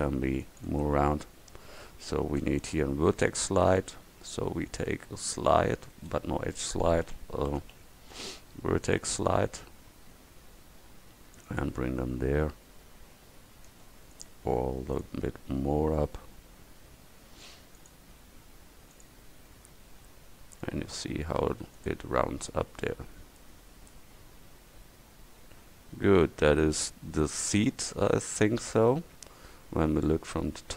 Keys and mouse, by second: 2.5 space, 13.7 space, 22.6 Tab, 24.0 middle click, 24.2 middle click.